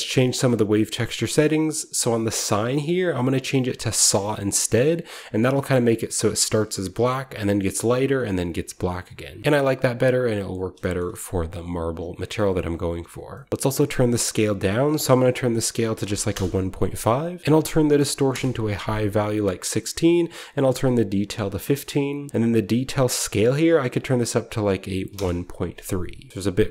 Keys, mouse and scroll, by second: 0.3 click, 2.3 click, 4.0 click, 4.8-6.7 scroll up 1, 5.4-7.2 shift+middle drag, 8.6-9.3 scroll down 1, 9.3 scroll down 1, 9.7-10.6 scroll up 1, 10.6-11.5 shift+scroll up 1, 10.7 shift+middle click, 11.5 click, 11.5 scroll up 1, 11.8-12.7 scroll down 1, 12.7 scroll down 1, 13.0-14.1 scroll up 1, 13.4-14.5 middle drag, 14.1-14.4 scroll up 1, 14.5 click, 15.8 typing, 16.2 Return, 17.4-17.7 typing, 18.2 Return, 19.9 click, 23.5 click, 23.9 click, 25.0 typing, 25.0 Return, 26.2-26.7 scroll down 1, 26.3 typing.